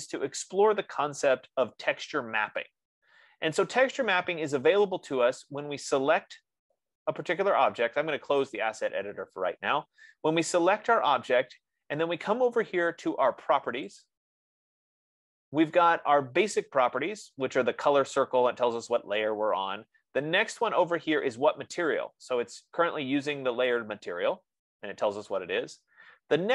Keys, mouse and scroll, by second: 3.2-4.4 right drag, 9.3-12.7 drag, 14.3 click, 19.3 F15, 21.1 click, 21.9-26.0 drag.